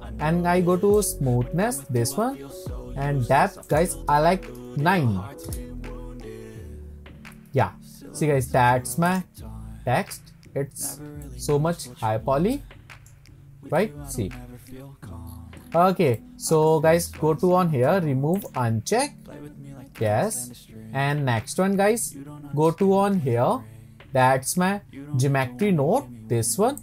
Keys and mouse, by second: 1.0 click, 3.8-7.5 drag, 11.2 shift+drag, 11.5-11.8 shift+middle drag, 12.6-13.1 shift+middle drag, 16.2 click, 16.5 middle click.